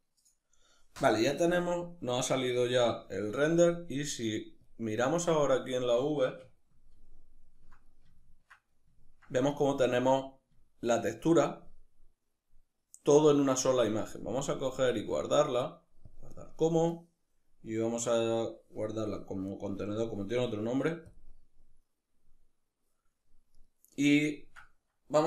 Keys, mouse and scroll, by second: 5.9-13.8 ctrl+middle drag, 13.8-22.9 drag, 22.9 right click, 23.4-25.2 ctrl+middle drag.